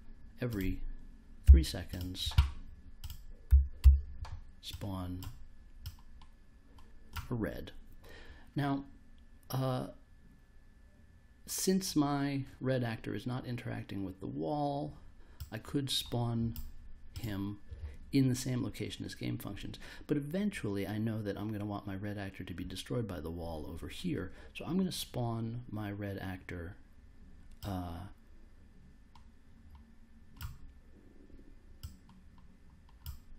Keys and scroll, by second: 1.4 3, 3.4 s, 3.8 p.